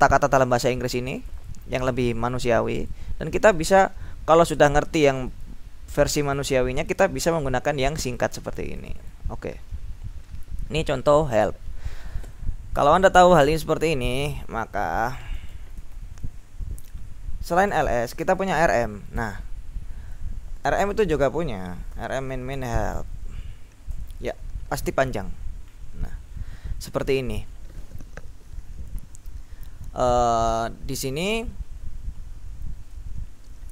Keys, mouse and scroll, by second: 0.5 scroll up 2, 0.7 click, 3.6 click, 5.2 click, 6.4 click, 7.3 click, 8.1 click, 9.7-12.8 scroll down 3, 12.9-13.6 scroll down 1, 14.4 q, 15.6 BackSpace, 16.0 ctrl+l, 17.5-19.2 typing, 20.5-23.7 typing, 24.0 Return, 25.4-26.4 scroll up 2, 26.4-27.8 scroll down 2, 31.7-32.1 scroll up 2.